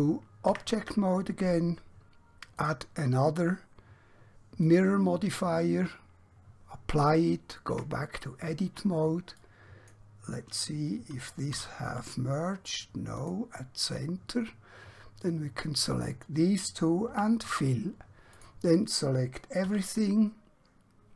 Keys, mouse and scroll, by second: 0.6 Tab, 2.6 click, 7.8 Tab, 9.5 click, 11.6 q, 13.1 click, 17.0 f, 18.4 click, 19.6 a.